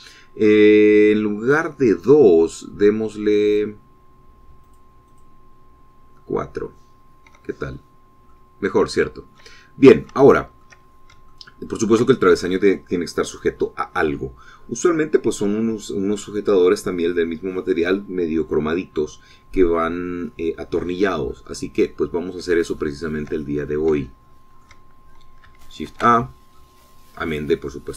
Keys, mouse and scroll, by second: 2.1-2.7 scroll down 2, 5.5 click, 6.0 click, 8.5 shift+middle click, 9.6-10.0 scroll down 2, 10.1-11.7 shift+middle drag, 11.8-12.2 shift+scroll up 2, 12.2 shift+middle click, 23.7 shift+middle click, 24.4-25.7 shift+middle drag, 27.4-27.9 middle drag.